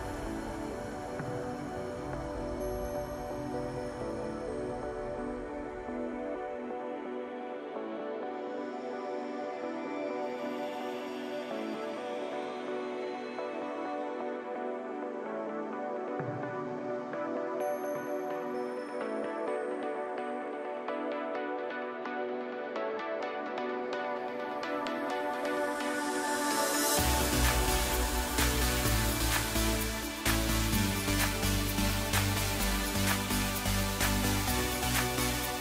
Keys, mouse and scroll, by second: 1.9 g, 3.7-6.2 middle drag, 6.2 click, 6.3 click, 6.7 scroll down 2, 6.9 middle click, 7.5-8.2 scroll up 1, 8.3 e, 9.4 alt+s, 11.4-13.2 middle drag, 13.2 click, 13.9 scroll down 2, 14.2-16.1 middle drag, 16.1 KP_7, 18.6-18.9 scroll up 1, 19.2 click, 20.1 ctrl+KP_Add, 20.4 ctrl+KP_Add, 20.7 ctrl+KP_Add, 22.9 shift+click, 24.8 shift+click, 27.0 shift+click, 28.5-30.1 middle drag, 30.1-30.9 scroll up 1, 30.9 e, 32.9 Tab, 33.2-33.5 scroll down 2, 33.5-35.6 middle drag.